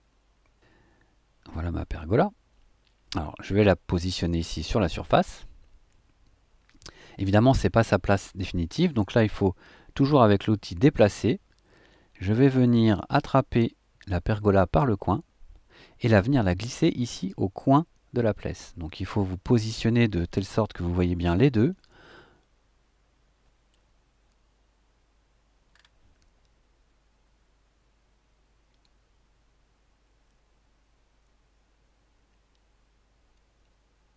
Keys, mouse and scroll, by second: 5.1 click, 11.9-13.8 middle drag, 14.8-17.3 middle drag, 18.5-19.6 drag, 20.5 shift+click, 21.2 shift+middle click, 21.4 shift+click, 21.7 shift+middle click, 21.8 click, 21.9 middle click, 22.3 click, 22.4-23.9 middle drag, 25.7-26.0 scroll up 1, 28.7 click.